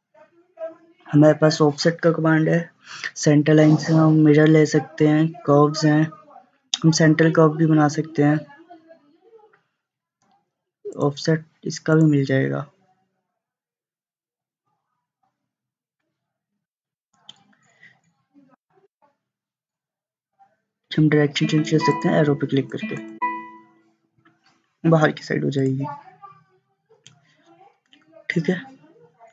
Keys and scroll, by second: 16.7 1, 17.0 Return, 18.7 5, 19.0 Return.